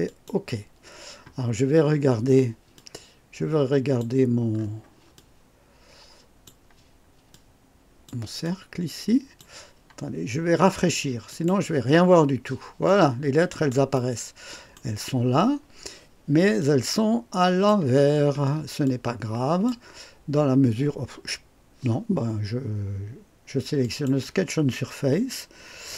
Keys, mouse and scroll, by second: 0.0 click, 1.4-1.9 scroll down 2, 2.7-4.2 drag, 4.6-4.9 scroll up 2, 5.1-6.6 drag, 7.3 click, 8.4 click, 11.3 click, 12.9 click, 13.9 right click, 16.6-17.9 drag, 18.1 scroll down 1, 18.8-19.8 drag, 23.8 click.